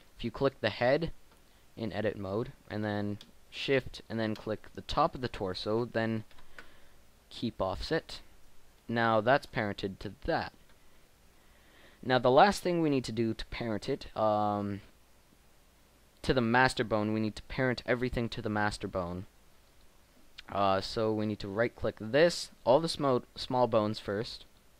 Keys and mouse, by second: 6.5 ctrl+p, 15.4 middle click, 20.0-21.9 right drag, 21.9 middle click, 23.1 shift+right click.